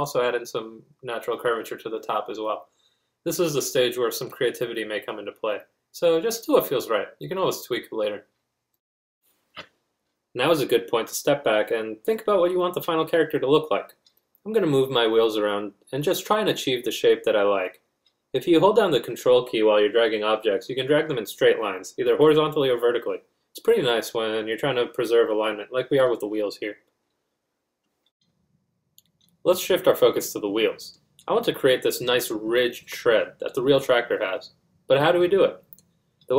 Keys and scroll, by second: 10.0 F1, 21.3 shift+2, 36.2 Caps_Lock.